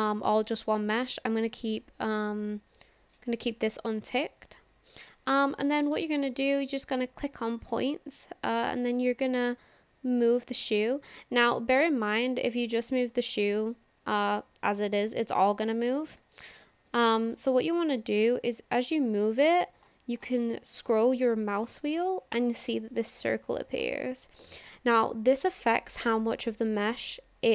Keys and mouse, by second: 1.0 middle click, 2.6-4.0 drag, 4.3 middle click, 5.3 shift+middle click, 6.0 shift+middle click, 7.6 click, 8.8-10.5 drag, 11.5 middle click, 14.0-16.0 drag, 16.2 ctrl+z, 16.8 ctrl+z, 18.4-27.5 drag.